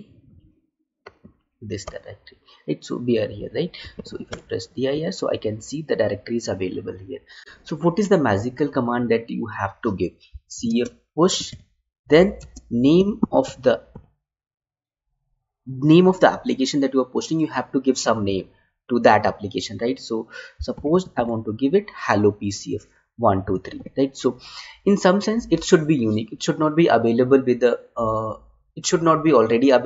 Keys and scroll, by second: 10.6 space, 12.3 space.